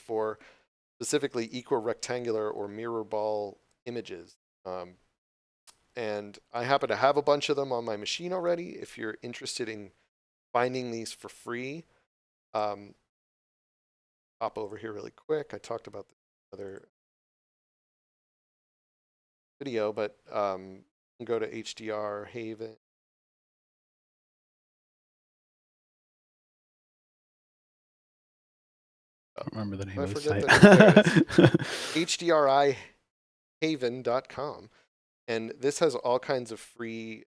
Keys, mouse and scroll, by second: 1.2 click, 4.3 click, 12.4 click, 27.3 scroll down 1, 28.1 click, 37.1 scroll down 1.